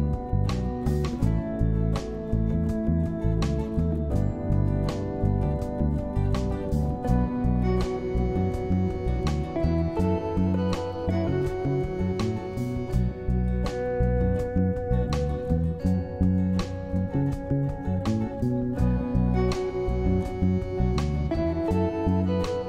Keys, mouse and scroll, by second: 3.7 q, 4.8 Right, 5.5 Left, 6.5 Left, 13.7 1, 14.1 Return.